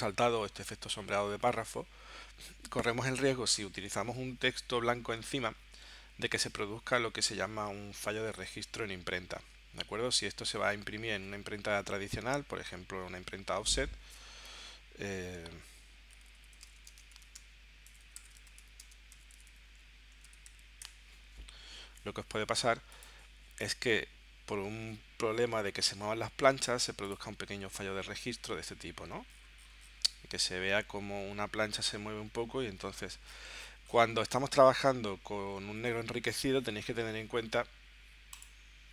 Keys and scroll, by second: 11.1 super+Tab, 13.8 super+t, 15.8-21.0 typing.